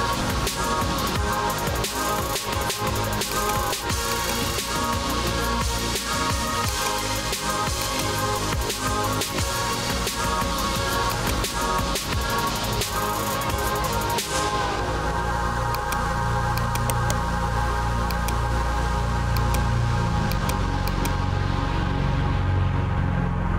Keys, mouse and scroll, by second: 1.5-3.2 typing, 2.7 scroll, 4.2 click, 6.8 click, 7.9 click, 8.6-9.9 typing, 11.5 click, 16.9 click, 17.0 right click, 18.2 click, 19.4 click, 20.4 click, 21.0 click.